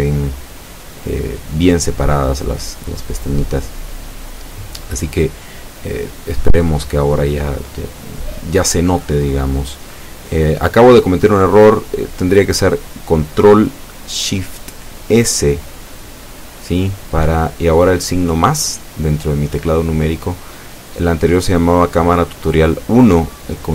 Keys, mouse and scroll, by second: 2.7 ctrl+KP_1, 4.0 Tab, 4.4-4.9 scroll down 2, 5.2 scroll up 2, 6.2 Tab, 6.9-7.3 scroll up 2, 7.6 scroll down 2, 8.0 a, 9.4 z, 10.6 Tab, 12.6 z, 13.1-13.5 scroll down 1, 16.4 Tab, 17.1 ctrl+s, 17.4 ctrl+click.